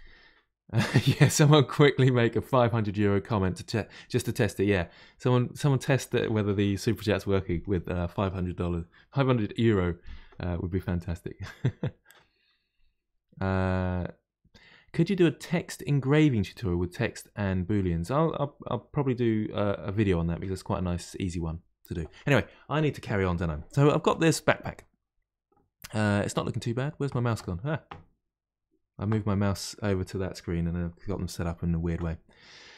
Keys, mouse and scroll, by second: 32.5-32.7 middle drag.